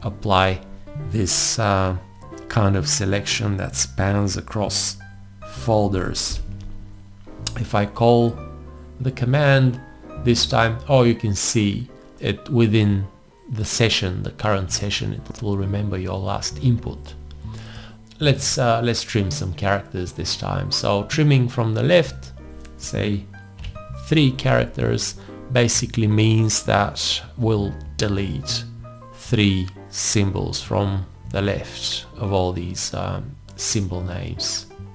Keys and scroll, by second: 6.3 alt+i, 23.6 3.